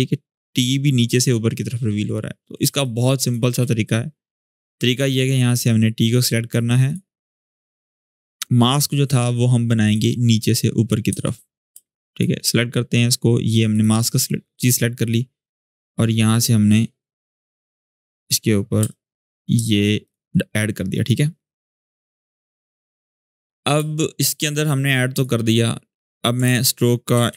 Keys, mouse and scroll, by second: 2.0 click, 2.4 space, 2.6-3.2 click, 2.9 space, 6.6 click, 10.4-10.8 scroll up 1, 10.8 `, 11.5 space, 11.7 click, 12.0 space, 13.5 click, 18.6 space, 18.6-19.2 click, 19.1 space, 19.8 shift+click, 21.3-22.3 drag, 23.5 space, 23.7-24.3 click, 24.3 space, 24.9 click, 25.4-26.1 scroll down 1, 26.2 ctrl+space, 26.7-27.3 typing.